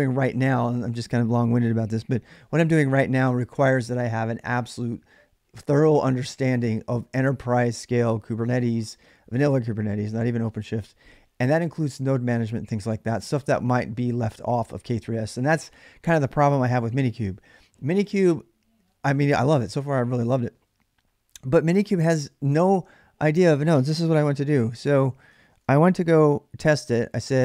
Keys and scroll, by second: 24.0 super+Tab, 25.3 ctrl+a, 25.6-27.4 typing.